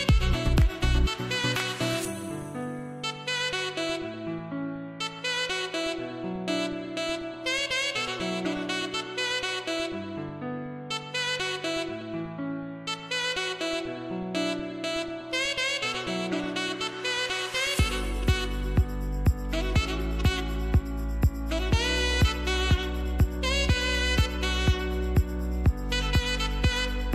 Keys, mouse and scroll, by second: 0.0 scroll down 1, 2.7-3.7 scroll up 1, 3.7 space, 3.8 click, 4.2 space, 4.5 scroll up 1, 5.6 scroll down 1, 6.8 scroll down 1, 7.0 space, 7.2 click, 7.5 space, 9.5 click, 9.8 space, 10.3-12.0 scroll down 1, 12.3 click, 20.2 click, 20.6 space, 20.8 click, 21.1 space, 23.2-27.1 drag.